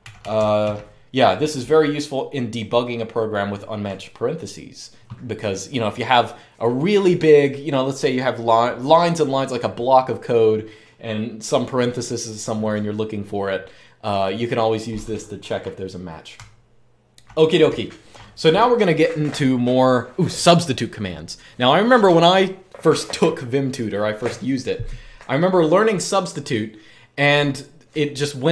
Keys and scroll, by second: 0.0-0.9 typing, 16.1-17.9 typing.